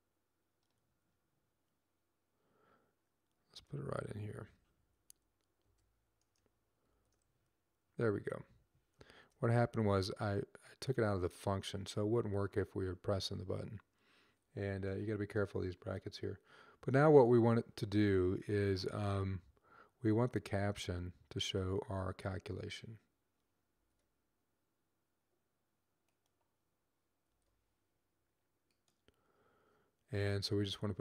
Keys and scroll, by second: 4.6 Left, 4.8 Left, 6.7 ctrl+v, 23.5 ctrl+x, 27.1 ctrl+v.